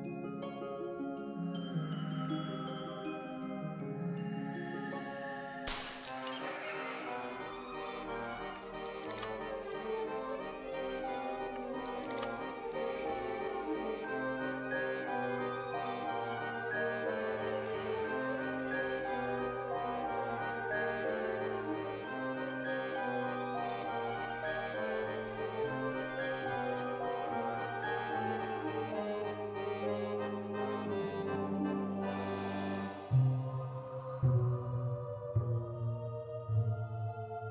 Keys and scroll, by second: 0.4 alt+x, 4.3 alt+x, 6.3 alt+x, 7.4 alt+x, 8.4 alt+x, 9.9 ctrl+s, 12.8 Delete, 32.7 ctrl+z, 34.6 1, 34.9 0, 35.1 Return.